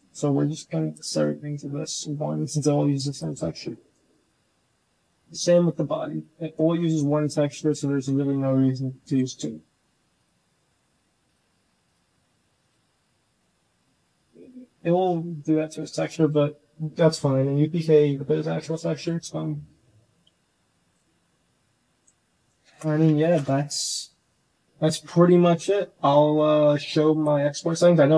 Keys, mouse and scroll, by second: 0.8 click, 1.2 Tab, 2.0-3.1 drag, 3.7 shift+click, 4.1 click, 5.0 Tab, 6.0 click, 6.8-7.3 drag, 8.1 g, 11.1 click, 12.9 Tab, 13.5 Tab, 14.1 click, 14.4 drag, 14.8 Tab, 15.5-16.0 drag, 21.0 g, 22.5 shift+drag, 23.1 click, 26.2-27.6 drag.